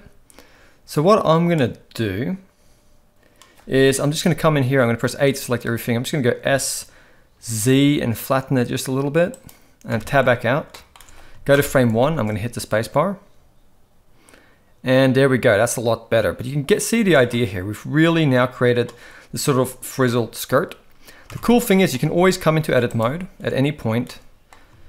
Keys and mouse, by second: 3.8 KP_1, 5.1 x, 6.4 g, 10.2 Tab, 10.7 middle click, 11.5 shift+Left, 12.1 space, 17.0 space, 17.3-18.8 middle drag, 20.0-20.4 middle drag, 21.3 Tab, 21.6 middle drag, 22.1 alt+a, 22.9 alt+shift+click, 24.0 middle click.